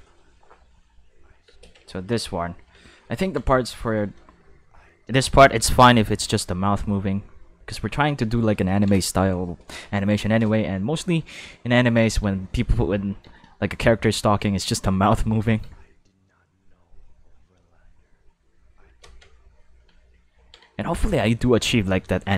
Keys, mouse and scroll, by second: 0.5 middle click, 1.4 space, 1.8 ctrl+middle click, 2.2 middle click, 2.5 ctrl+middle click, 2.8 middle click, 3.1 ctrl+middle click, 3.9 ctrl+click, 4.2 space, 5.5 space, 8.6 ctrl+s, 11.3 click, 12.2 space, 13.2 space, 15.6 space, 18.8 space, 19.3 ctrl+middle click, 19.9 middle click, 20.3 ctrl+middle click, 20.8 middle click, 21.4 click.